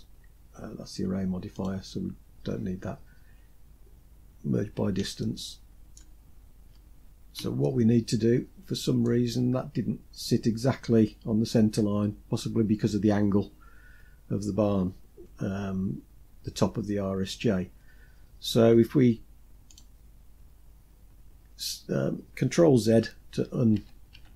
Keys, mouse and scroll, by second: 0.9 click, 2.1-3.1 scroll up 2, 4.6-5.4 shift+middle drag, 5.6 scroll up 1, 6.3-6.8 scroll down 1, 7.0-8.4 shift+middle drag, 19.1 click, 22.3 ctrl+z, 22.7 ctrl+z, 23.1 ctrl+z, 23.5 ctrl+z.